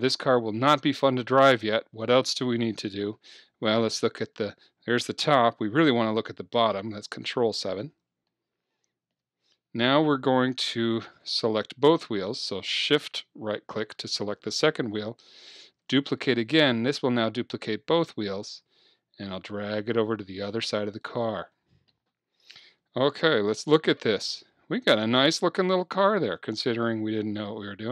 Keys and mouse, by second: 4.0 KP_7, 6.6 ctrl+KP_7, 8.3 middle click, 11.1-13.0 right drag, 15.8 shift+d, 21.2-23.2 drag, 23.3 KP_3, 24.0-25.4 middle drag, 25.6 middle click.